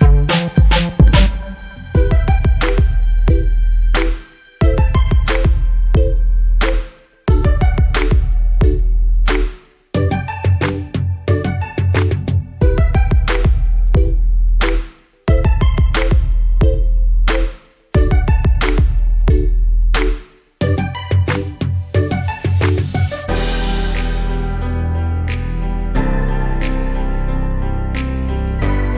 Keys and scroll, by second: 11.3 ctrl+g, 14.1-15.7 typing, 16.8 Return.